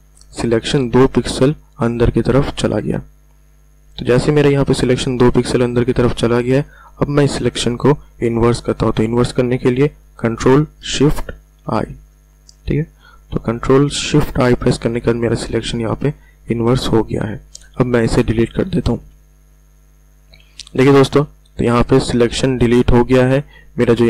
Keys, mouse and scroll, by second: 2.7-3.4 ctrl+alt+scroll down 2, 4.1 space, 4.3 click, 4.6 space, 5.3 ctrl+alt+scroll down 1, 9.8 ctrl+alt+scroll down 1, 13.4-13.9 ctrl+alt+scroll up 2, 14.9-15.4 ctrl+alt+scroll down 2, 18.5 ctrl+alt+scroll up 1, 18.9 Delete, 20.3 ctrl+d, 22.6 ctrl+alt+scroll up 1.